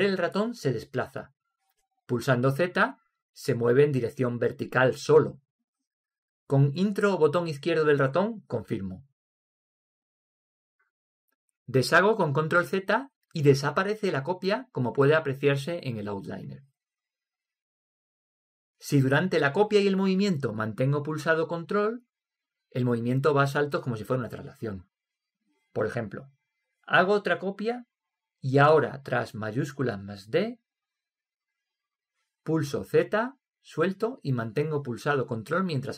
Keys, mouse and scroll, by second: 3.8 z, 13.3 ctrl+z, 29.7 shift+d, 33.1 z.